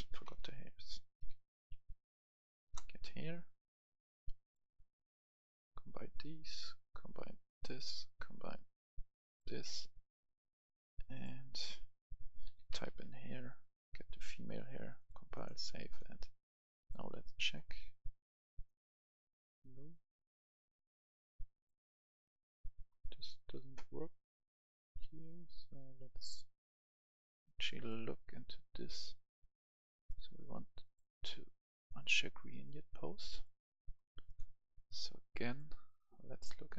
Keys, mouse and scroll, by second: 0.0-0.6 typing, 1.7 r, 2.6 Return, 3.6-9.9 drag, 12.4-12.8 typing, 14.0 click, 24.1-27.9 right drag, 30.8-32.5 drag, 32.5 right click, 33.3 click.